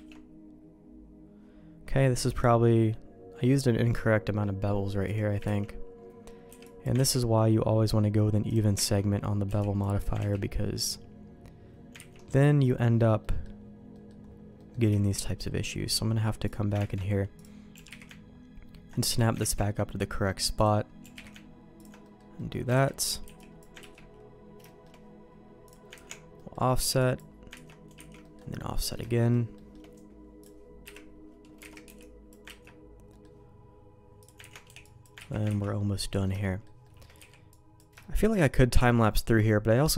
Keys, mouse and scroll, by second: 4.0 middle click, 5.0 click, 5.6 ctrl+x, 6.4 b, 7.1 ctrl+q, 8.4 click, 8.9 ctrl+x, 9.4 b, 10.2 ctrl+q, 12.1 ctrl+x, 13.2 middle click, 13.9 click, 14.6 middle click, 14.9 shift+middle click, 16.4 click, 16.7 ctrl+shift+Tab, 17.7 g, 18.3 ctrl+right click, 19.4 ctrl+shift+Tab, 21.0 g, 22.0 middle click, 22.3 middle click, 22.7 alt+a, 23.2 b, 23.8 ctrl+q, 24.6 shift+middle click, 25.6 click, 25.9 ctrl+x, 26.3 middle click, 26.7 b, 27.5 ctrl+q, 27.9 ctrl+x, 28.2 middle click, 28.7 middle click, 29.0 shift+middle click, 29.5 shift+middle click, 30.4 click, 30.8 KP_Decimal, 31.6 alt+a, 31.8 b, 32.6 ctrl+q, 33.1 middle click, 34.2 click, 34.5 ctrl+x, 34.6 b, 35.3 ctrl+q, 35.4 ctrl+x, 36.0 middle click, 36.4 shift+middle click, 36.8 shift+middle click, 37.4 b, 38.0 shift+middle click, 38.9 ctrl+q.